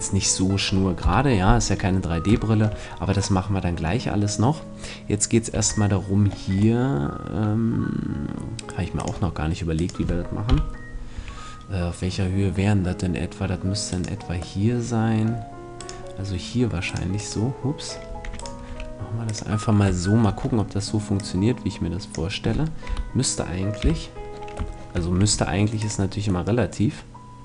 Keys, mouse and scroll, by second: 1.0 KP_1, 5.5 Tab, 9.0-10.7 drag, 9.8 right click, 10.5 KP_1, 11.2 right click, 11.2 a, 11.7-13.9 middle drag, 13.9 right click, 14.6-18.2 middle drag, 18.2-20.2 right drag, 18.2 e, 18.6 s, 19.4-22.9 drag, 20.0-21.4 middle drag, 22.9 KP_1, 23.8 KP_3, 24.9-27.2 middle drag, 25.2 e.